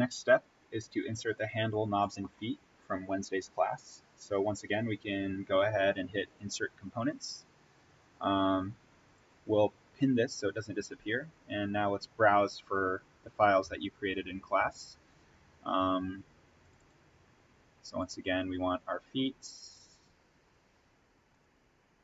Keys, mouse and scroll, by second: 6.3 click, 9.1 click, 12.2 click, 16.5 click.